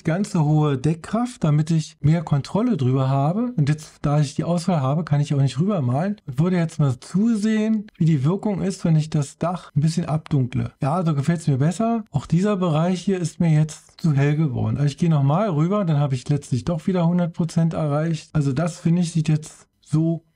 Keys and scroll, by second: 0.5 5.